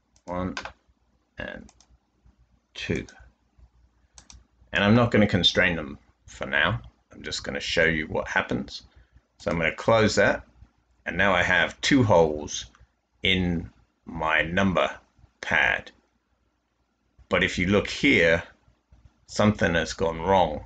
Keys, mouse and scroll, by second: 6.4 typing.